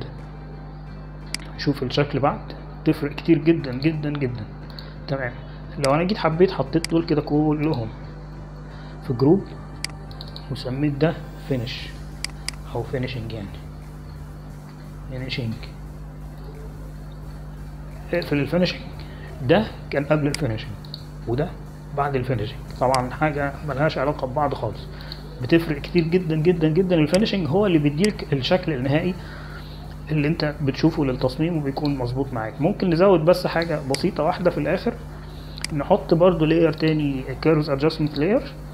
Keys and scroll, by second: 11.3 ctrl+shift+g, 13.9-17.7 typing, 18.5 Return.